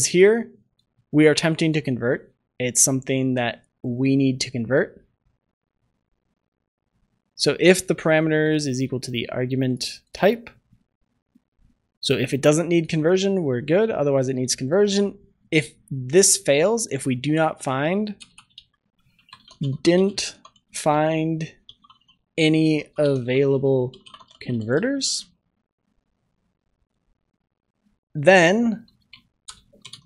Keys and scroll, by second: 25.1 ctrl+s, 28.9 ctrl+s.